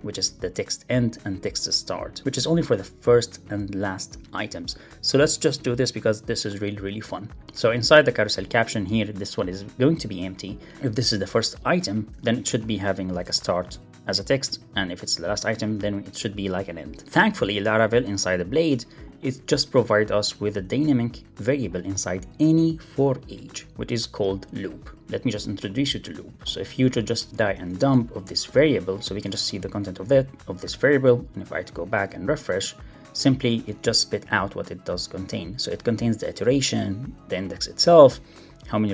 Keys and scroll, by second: 6.8 super+c, 8.4 alt+Up, 12.3 super+v, 12.6 alt+shift+Left, 14.3 alt+shift+Left, 17.0 alt+shift+Left, 20.3 super+Right, 24.8 Left, 25.2 Return, 26.8 super+s, 27.3 super+z, 30.1 super+s, 33.1 super+r.